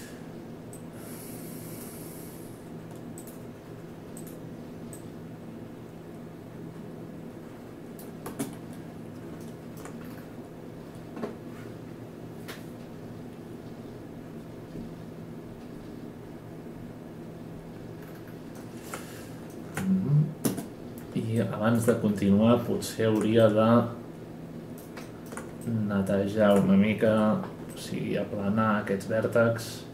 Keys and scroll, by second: 8.4 space, 20.4 space, 27.0 F9.